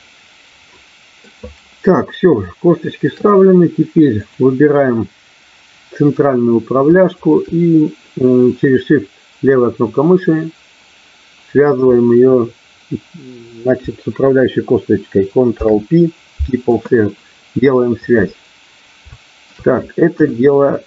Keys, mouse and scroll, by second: 2.4 shift+middle click, 4.2 click, 7.2 shift+click, 15.4 ctrl+p, 19.0 shift+middle click, 20.2 KP_1.